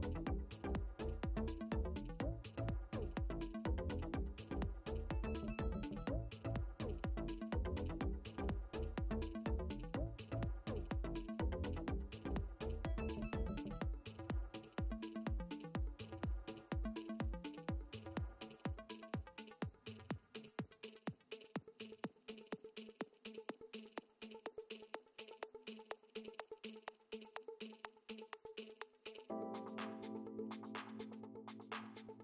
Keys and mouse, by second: 12.5 click, 14.9 click, 17.9 click, 19.3 space, 19.5 click, 21.1 click, 25.3 click, 25.9 ctrl+z, 26.4 ctrl+z, 27.0 click, 30.4 click.